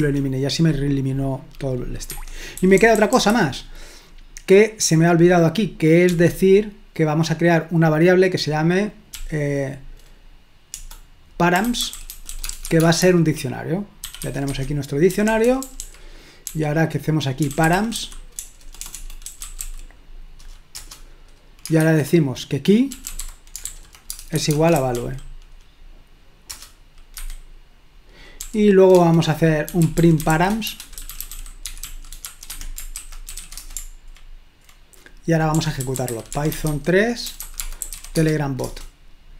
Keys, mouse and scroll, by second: 0.0 Escape, 2.2 Escape, 2.6-3.2 typing, 6.1 o, 9.2 k, 10.8-20.0 typing, 14.4 Escape, 20.8 Return, 21.8-25.3 typing, 26.5 Return, 27.2 Escape, 28.4 typing, 29.5-34.1 typing, 35.4-39.0 typing.